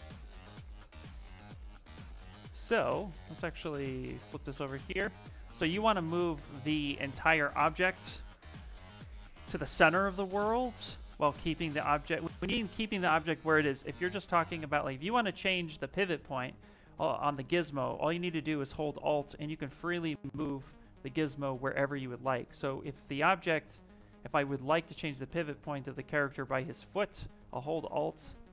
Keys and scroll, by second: 3.9 v, 5.6 q, 14.2 w.